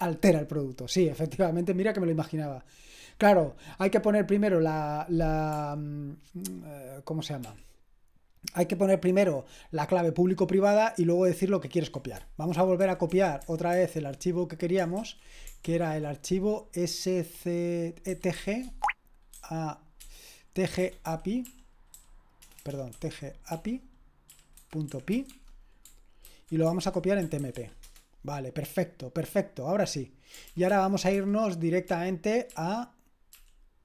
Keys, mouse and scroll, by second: 7.5 ctrl+p, 12.5 alt+b, 12.8 alt+b, 13.1 alt+b, 13.4 alt+b, 13.7 alt+b, 15.0 ctrl+w, 15.7 ctrl+w, 17.9-28.1 typing, 30.5 ctrl+p, 30.7 ctrl+p, 31.2 ctrl+p, 31.9 ctrl+p, 32.6 ctrl+p, 33.4 ctrl+p.